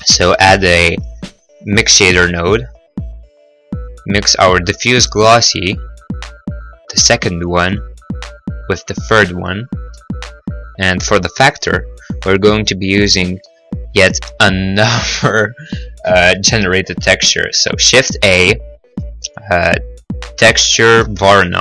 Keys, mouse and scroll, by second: 0.0 shift+a, 0.3 h, 0.5 m, 2.2 click, 3.5 click, 7.3 click, 10.1 scroll, 10.4 middle click, 10.4 middle click, 10.9 middle click, 10.9-11.6 scroll, 11.2 middle click, 11.4 middle click, 11.6 middle click, 11.9 middle click, 12.1 middle click, 12.2 middle click, 12.3-12.8 scroll, 13.4 scroll, 18.0 shift+a, 20.6-21.6 typing, 21.5 click.